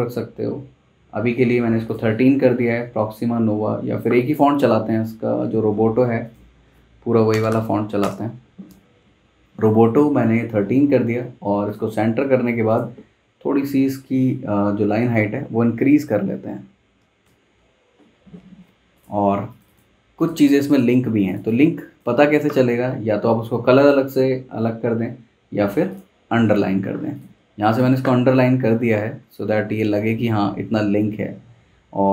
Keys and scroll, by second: 7.1-8.0 typing, 8.0 Return, 16.2 shift+Page_Up, 16.8 shift+Page_Down, 17.2 Page_Up, 17.4 Page_Up, 17.6 Page_Up, 18.2 ⟲, 27.4 super+z.